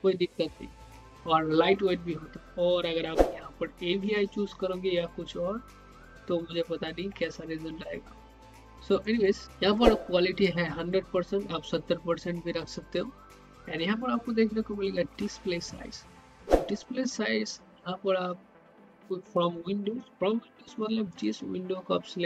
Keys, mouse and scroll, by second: 9.0-12.8 drag, 16.6 click, 21.1 click.